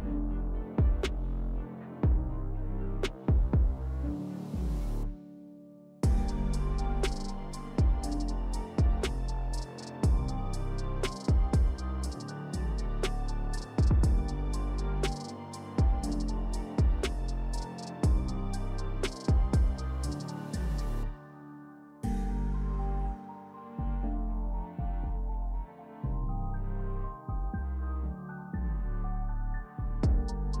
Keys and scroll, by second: 4.3 3, 6.6 s, 7.9-8.8 typing, 11.1 3, 13.4 s, 14.9 s, 17.0 s, 18.4 alt+q, 21.0 3, 23.4 s, 24.8 s.